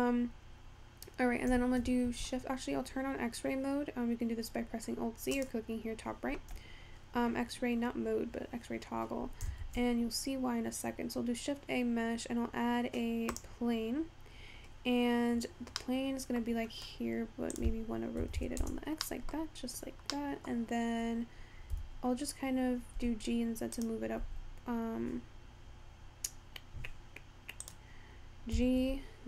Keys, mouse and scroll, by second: 0.7-1.2 scroll down 1, 1.8 shift+a, 5.4-8.5 drag, 9.6 shift+a, 15.8-17.5 middle drag, 17.5-18.9 drag, 18.9 scroll down 3, 19.0 middle click, 19.4-20.4 scroll up 3, 20.4-21.8 middle drag, 21.8 g, 24.5 z, 28.6 g.